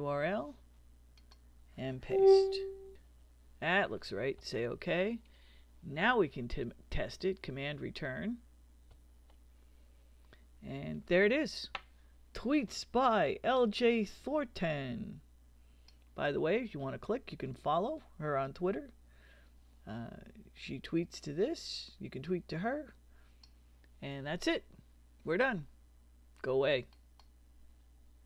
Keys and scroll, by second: 2.9 super+v, 4.3 Return, 8.9 super+Return.